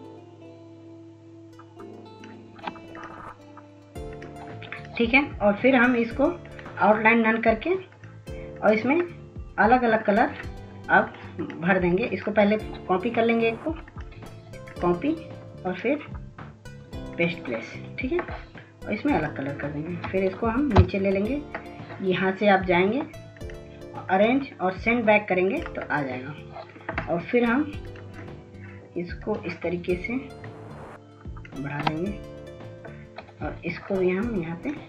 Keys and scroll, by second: 19.8 ctrl+shift+[.